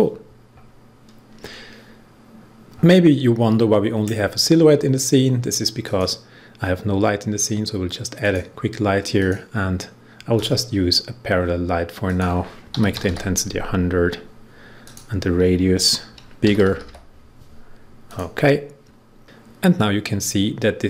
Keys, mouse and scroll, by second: 2.6 click, 5.8 click, 8.1 click, 12.4-13.5 typing, 14.8 click, 16.1-17.3 typing, 18.0 click.